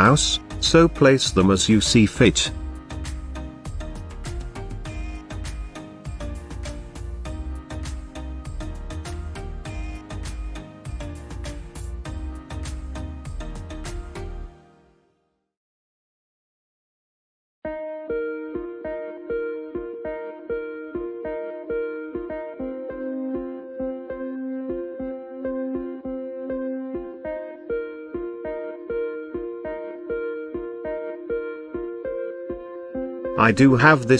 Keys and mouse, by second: 0.2-0.6 middle drag, 0.8 shift+middle drag, 2.1 g, 2.4 z, 4.2 shift+drag, 4.7-5.0 middle drag, 5.2-5.7 shift+middle drag, 6.4 s, 7.0 click, 7.8 g, 8.1 shift+z, 10.6 click, 11.2 middle click, 12.0 KP_Decimal, 12.5-14.5 middle drag, 15.6 shift+middle drag, 17.8 shift+d, 18.1 x, 18.9 drag, 19.4 shift+drag, 20.0 g, 20.3 x, 22.3 click, 23.1-24.1 shift+middle drag, 25.0-26.3 middle drag, 26.8 KP_0, 29.8 click.